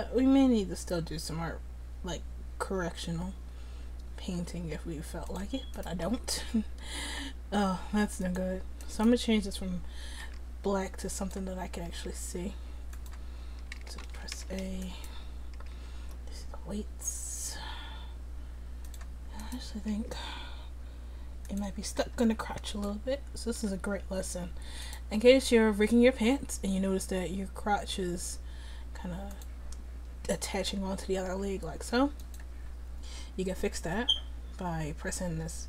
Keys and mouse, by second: 5.8 right click, 6.1 r, 10.3 r, 12.0 r, 13.8 a, 14.1 a, 14.4 alt+r, 15.1 click, 15.6 r, 20.0 r, 22.0 middle click, 25.2 r, 31.3 r.